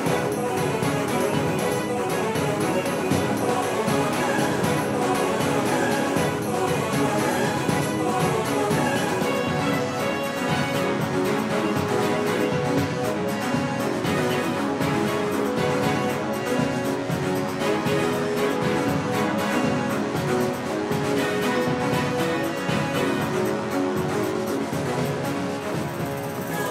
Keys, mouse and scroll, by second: 12.6 c, 24.1-26.7 drag.